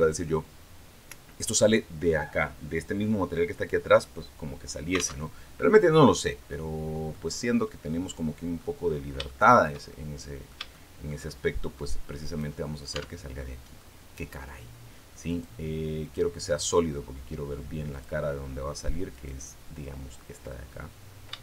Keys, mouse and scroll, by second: 5.0 alt+Tab, 6.3 click, 7.1 middle click, 7.5-8.5 drag, 8.6-9.0 scroll up 3, 9.1 shift+middle click, 10.0 middle click, 10.5-11.7 shift+middle drag, 12.1 right click, 12.7 Tab, 13.2 middle click, 15.1 click, 15.8 click, 17.7 click, 18.9 right click, 21.2 shift+right click.